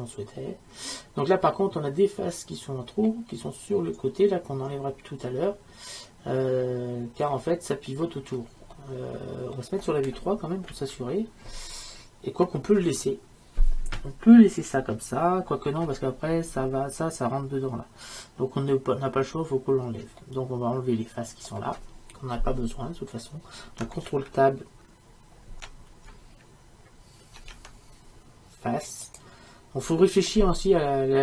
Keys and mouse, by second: 5.5-10.7 middle drag, 10.7 KP_3, 20.2-27.4 middle drag, 27.4 ctrl+Tab, 30.3-31.2 middle drag.